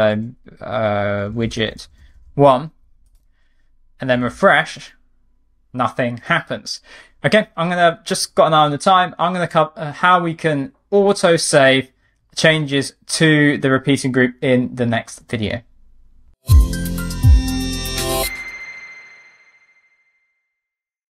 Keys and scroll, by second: 5.0 super+r.